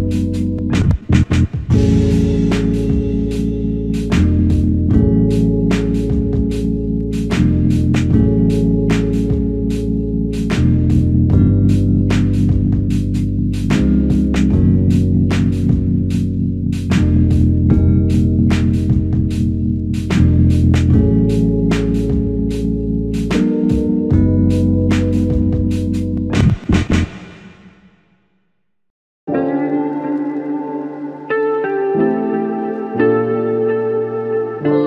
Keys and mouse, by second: 0.5 alt+click, 1.5 double click, 3.0 alt+click, 5.1 alt+click, 6.1 double click, 11.8 shift+click, 13.0 alt+click, 15.4 double click, 17.8 alt+click, 19.1 alt+click, 24.2 alt+click, 27.1 typing, 27.9 alt+shift+click, 30.2 double click.